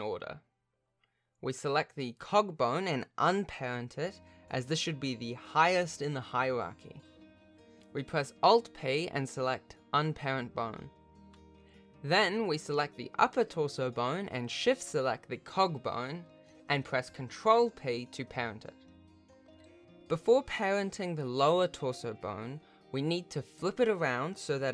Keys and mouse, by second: 2.5 click, 4.2 g, 9.2 alt+p, 12.1 click, 15.5 shift+click, 18.5 ctrl+p, 21.1 alt+a, 22.1 click, 22.4 g.